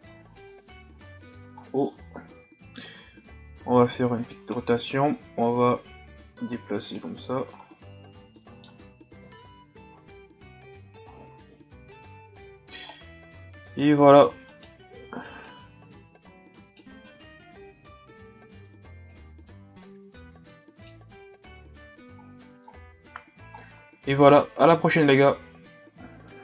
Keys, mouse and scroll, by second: 0.8 o, 1.6-2.0 ctrl+scroll down 5, 2.0-2.3 shift+scroll up 2, 3.0 r, 4.5 ctrl+scroll down 1, 4.8-5.4 scroll up 1, 5.4-7.0 drag, 7.0 Tab, 7.4 a, 7.6-8.4 scroll down 5, 8.4 middle click, 9.2 KP_1, 10.1-10.5 scroll down 3, 11.1-11.5 shift+scroll down 1, 11.7-12.7 scroll up 4, 12.7-13.7 shift+scroll up 7, 13.7 Tab, 14.0 scroll up 2, 14.2 Tab, 14.5 right click, 14.8 Tab, 15.5 right click, 17.1 ctrl+z, 18.1 o, 19.1 right click, 21.1 Tab, 21.8 a, 22.2-23.6 scroll down 9, 23.6-24.8 shift+scroll down 2.